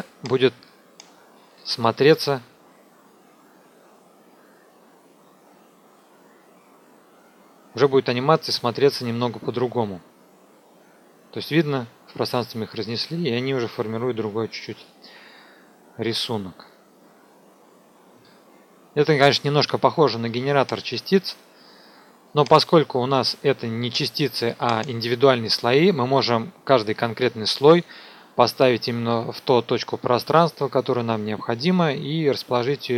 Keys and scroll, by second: 1.5 n, 2.0 KP_0.